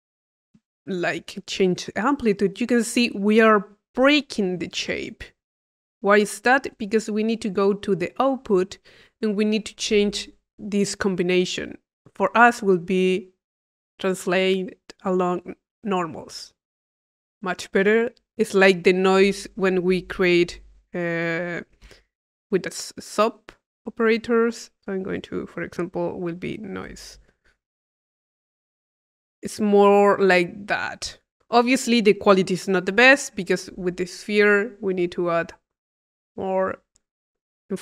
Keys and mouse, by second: 8.2-10.5 drag, 11.4 click, 16.1 click, 20.2 click, 20.3 Tab, 21.7 click, 21.9 click, 22.3 p, 23.4 click, 24.5-27.5 drag, 24.9 Tab, 28.2 click, 28.8 click, 33.4 click, 34.8-36.7 drag.